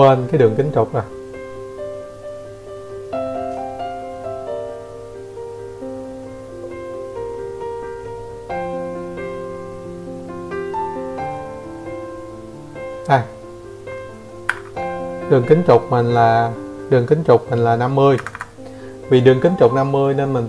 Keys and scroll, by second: 6.6 Escape, 10.2 Escape, 10.3 Escape.